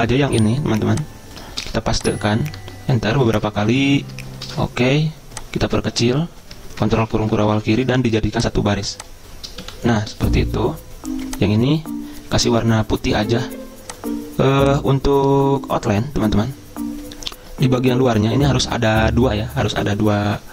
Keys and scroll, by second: 1.8 ctrl+c, 2.9 Return, 3.0 Return, 3.1 Return, 3.2 Return, 3.3 Return, 3.5 Return, 3.6 Return, 3.7 Return, 3.8 Return, 3.9 Return, 4.7 ctrl+v, 7.0 ctrl+[, 7.1 ctrl+[, 7.2 ctrl+[, 7.3 ctrl+[, 9.8 Delete, 12.2 Delete.